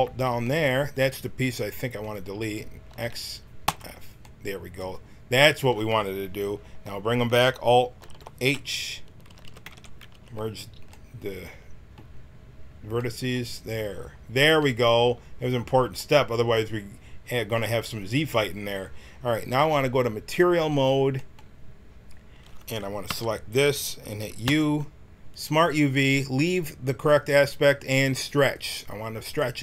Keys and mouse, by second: 2.8 x, 7.9 alt+h, 9.2 a, 9.4 a, 9.6 w, 10.0 a, 16.8 middle click, 19.5 click, 20.3-22.6 right drag, 23.0 l, 24.4 u.